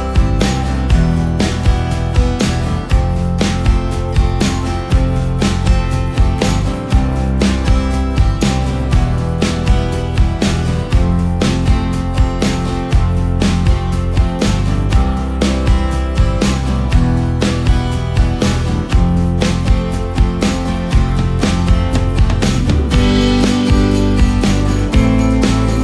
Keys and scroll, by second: 17.2 ctrl+space.